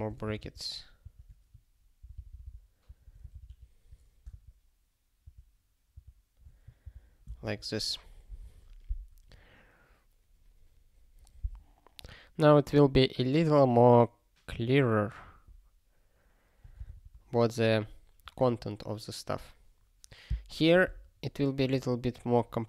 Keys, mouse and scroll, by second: 0.2 alt+shift+s, 2.0 ctrl+d, 2.1 ctrl+d, 2.8 ctrl+p, 3.3 alt+f, 3.4 alt+f, 6.8 ctrl+n, 7.3 ctrl+s, 21.7 click.